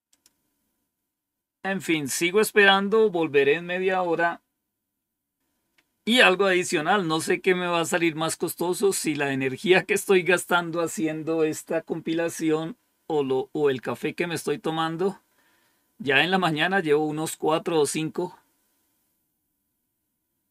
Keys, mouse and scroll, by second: 0.0 click.